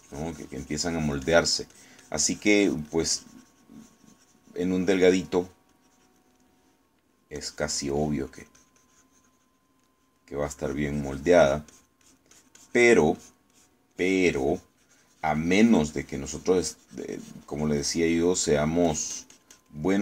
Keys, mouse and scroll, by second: 7.7 middle click, 8.4 click, 9.4-11.4 drag, 11.5-19.2 drag, 19.4 middle click, 19.9 click.